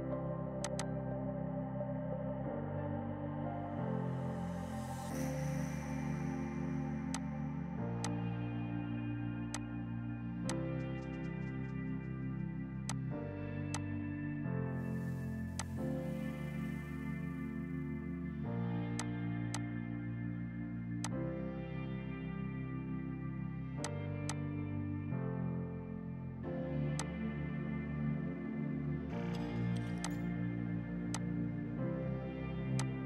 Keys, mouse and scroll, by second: 1.7 KP_3, 1.8 KP_0, 2.1 KP_Enter, 3.0 space, 5.0 F4, 7.2 click, 13.0 click, 15.5 F2, 15.7 click, 18.7 ctrl+g, 19.1 shift+click, 19.3 e, 19.6 shift+click, 20.4 u, 21.1 click, 22.0 ctrl+right click, 23.9 click, 26.1 F4, 27.0 click, 30.0 click, 32.8 click.